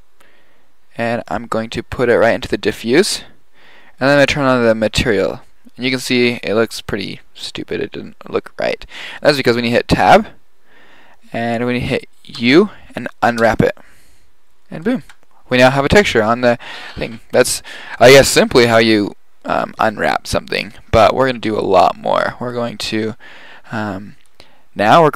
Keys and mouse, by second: 3.0 click, 3.2-3.5 middle drag, 4.2-5.8 drag, 10.0 Tab, 12.8 u, 15.1 Tab.